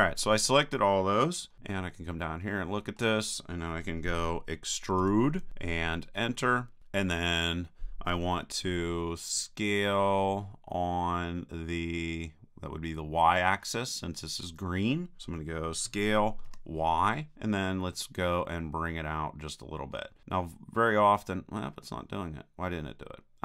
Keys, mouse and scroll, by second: 1.5-3.7 middle drag, 5.0 e, 10.2-12.0 middle drag, 12.6 middle click, 15.9 s, 19.7-23.4 middle drag.